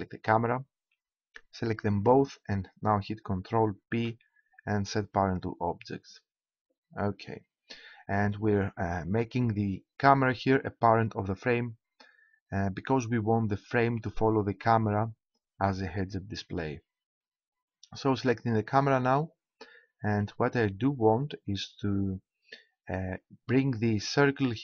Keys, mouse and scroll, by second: 0.4-2.1 right drag, 3.9 ctrl+p, 7.6-9.5 middle drag, 18.8-20.5 right drag, 20.5-24.6 middle drag.